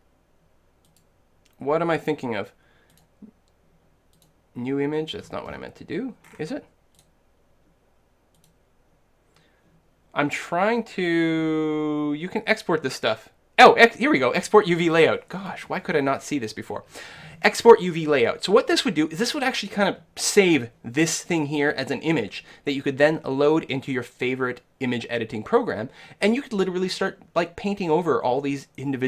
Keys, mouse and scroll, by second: 5.2-8.4 middle drag, 7.0-10.3 drag.